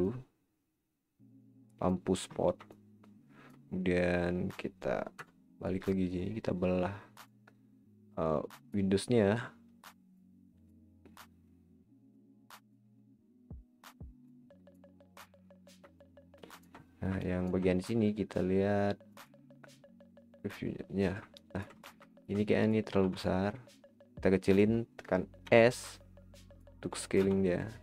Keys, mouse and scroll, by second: 0.0 click, 2.3-2.7 scroll up 4, 2.7-5.1 middle drag, 5.1 KP_0, 7.2-15.0 drag, 15.0-15.8 scroll up 9, 15.9-16.7 shift+middle drag, 16.8 scroll down 1, 19.2 click, 20.7-21.2 scroll down 8, 21.3-21.8 middle drag, 21.8 scroll down 5, 22.1-22.6 shift+middle drag, 22.6 click, 23.0 s, 24.8 scroll down 5, 25.4 s, 27.2 s.